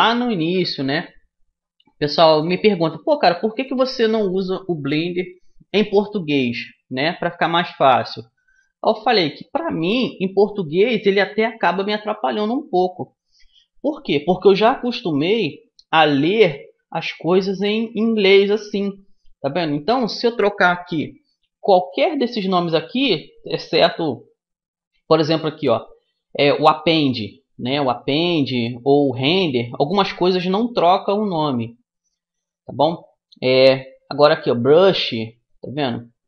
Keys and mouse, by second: 16.5-18.4 drag, 29.5-31.5 drag, 35.1-36.2 drag.